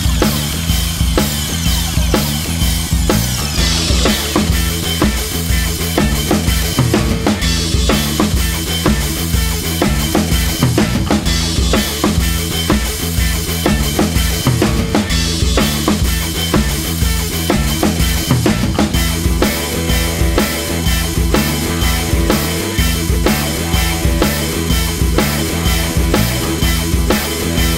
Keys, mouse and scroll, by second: 0.0 alt+click, 0.1 scroll down 3, 0.1 middle click, 0.5 s, 0.7 KP_1, 0.8-2.0 scroll up 8, 1.0 shift+middle click, 1.2 shift+middle click, 2.0-2.5 scroll up 1, 2.5 scroll up 1, 2.6 scroll down 10, 2.7 scroll up 1, 2.9 scroll down 1, 3.0 middle click, 3.6-9.9 typing, 3.8 Tab, 4.3 scroll up 3, 5.5 click, 7.8 shift+middle click, 7.9 Tab, 8.3 scroll up 4, 8.5 shift+middle click, 8.7 click, 9.8 click, 10.3 click, 10.4 Tab, 10.5 scroll down 3, 10.6-11.0 middle drag, 11.0-11.4 scroll down 1, 11.4 click, 11.7 middle click, 11.8 KP_1, 11.9 Tab, 12.1 2, 12.1 middle click, 12.2 scroll up 1, 12.3 a, 12.3 shift+middle click, 13.5 shift+middle click, 13.8 scroll up 1, 13.9-16.9 typing, 14.0 click, 14.2 middle click, 14.5 middle click, 14.6 Tab, 14.8 click, 14.8 middle click, 15.4 shift+middle click, 15.5-15.8 scroll up 2, 15.8 middle click, 16.7 click, 17.2 click, 17.5 scroll down 4, 17.6 shift+middle click, 17.7 scroll up 2, 17.8 scroll down 1, 17.8 middle click, 17.9 scroll up 1, 18.1-19.1 typing, 18.6 scroll down 1, 19.2 Tab, 19.3 middle click, 20.2 Tab, 20.3 shift+middle click, 20.4-20.7 scroll up 2, 20.7 shift+middle click, 21.1 2, 21.1 middle click, 21.6 a, 21.8 Tab, 21.9 click, 24.4 scroll down 2, 24.6 Tab, 24.7 middle click, 24.8 a, 25.5 a, 25.6 a, 26.4 scroll up 1, 26.5 shift+middle click, 26.6-27.7 typing, 26.9 scroll down 1, 27.1 shift+middle click, 27.4 middle click.